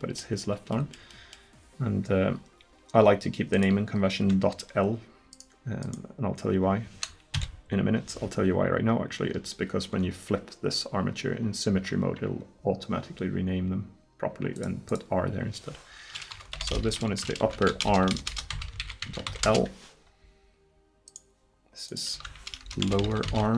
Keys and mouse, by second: 7.4 KP_1, 14.6-16.7 drag, 16.7 p, 18.3 BackSpace, 21.1-23.5 drag.